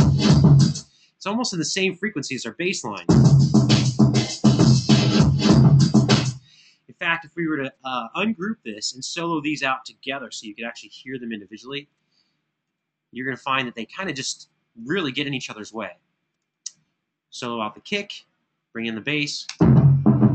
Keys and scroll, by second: 0.5 space, 6.0 space, 10.3 super+=, 19.2 space.